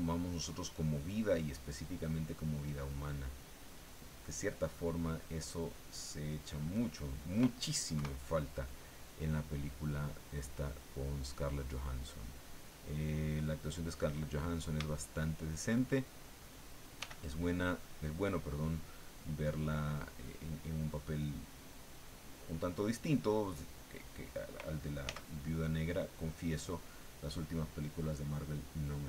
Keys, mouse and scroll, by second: 1.4-3.0 drag, 3.3-5.3 drag, 6.0 middle click, 7.9 KP_1, 8.9 click, 9.3 click, 10.7-11.8 drag, 12.1 click, 13.3 click, 15.0 shift+middle click, 17.0 f, 17.8 click, 18.7-19.8 drag, 20.3-22.7 drag, 25.0 f, 26.2 click, 28.4 click.